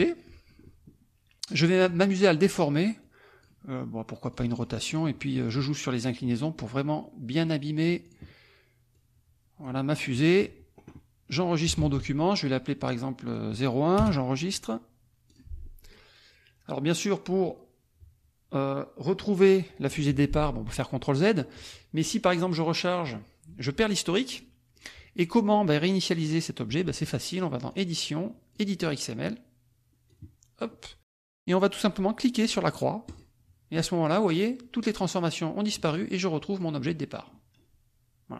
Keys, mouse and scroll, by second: 1.8 click, 3.0 click, 4.3 click, 4.9 click, 5.4 click, 6.0-7.5 drag, 8.0 click, 8.9 click, 9.9 click, 11.8 ctrl+s, 13.2 click, 14.0 Return, 15.2 click, 22.0 click, 22.9 click, 24.7 click, 27.7 click, 28.6 click, 30.2 click, 33.0 click, 33.8 click, 35.9-37.4 drag.